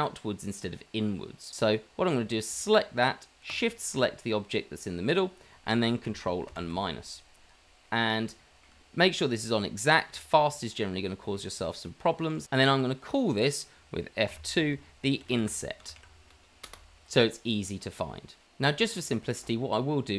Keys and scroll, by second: 6.9 KP_Subtract, 8.6 KP_Subtract, 14.2 F2, 15.4 F2.